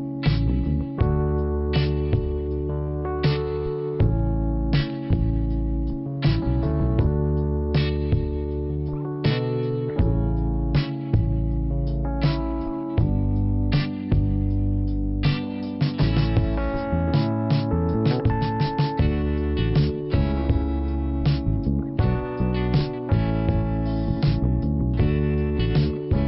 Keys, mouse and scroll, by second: 0.1 click, 1.3 click, 1.4 click, 2.5 click, 4.3 click, 4.3 click, 5.6 click, 6.9 click, 8.0 click, 9.8 click, 9.8 click, 11.0 click, 12.6 click, 13.2-13.7 scroll down 2, 16.8 click, 17.9 click, 20.7 click, 21.9 click, 22.6 click, 23.6 click, 26.1 middle click.